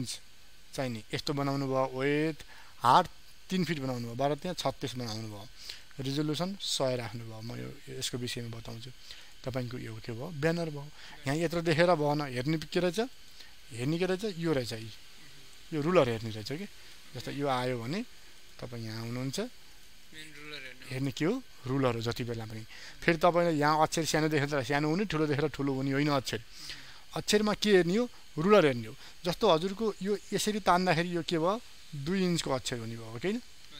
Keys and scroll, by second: 20.1 ctrl+space.